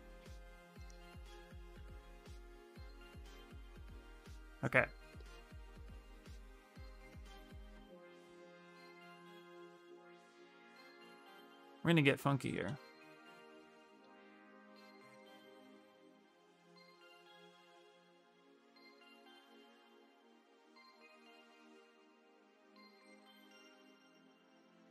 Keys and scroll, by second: 1.1-2.2 typing, 18.0 ctrl+z, 21.7 ctrl+z, 22.1 ctrl+z, 23.4 s.